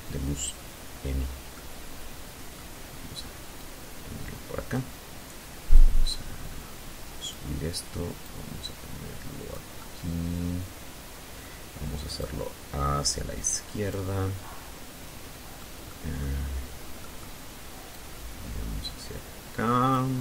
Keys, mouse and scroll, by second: 0.9-2.2 drag, 3.0-4.8 drag, 5.5-7.0 drag, 7.1-8.9 middle drag, 9.5-11.4 drag, 11.6-13.0 middle drag, 13.2 middle click, 14.3 middle click, 15.2-17.4 drag, 18.6 r.